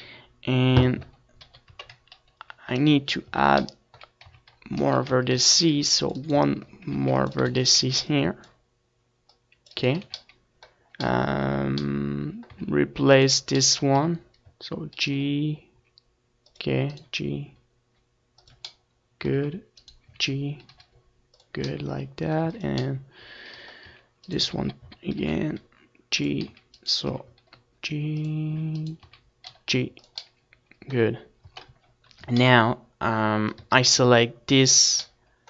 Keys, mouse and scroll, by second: 0.1 right click, 0.3 z, 1.7 middle click, 2.1 click, 2.8-3.9 middle drag, 3.2 z, 3.9-6.0 right drag, 4.3 z, 4.7-6.7 drag, 6.0 Tab, 6.3 ctrl+s, 6.7-8.7 middle drag, 7.7 ctrl+s, 9.0 ctrl+s, 11.7 KP_7, 12.0 Tab, 12.8 ctrl+z, 13.5-15.5 typing, 15.9 ctrl+r, 16.6-19.7 right drag, 16.6 a, 17.2 ctrl+r, 17.7 a, 18.1 c, 20.0 right click, 20.4 z, 20.6-22.1 middle drag, 22.3-27.6 middle drag, 23.1 z, 23.8-26.0 right drag, 24.8 z, 26.1 g, 27.7 click, 28.1 right click, 29.3 g, 29.6 click, 30.1-31.9 middle drag, 30.9 z, 31.7 z, 31.9-33.1 right drag, 32.5 g, 33.1 middle click, 33.3-35.1 drag, 34.2 ctrl+s.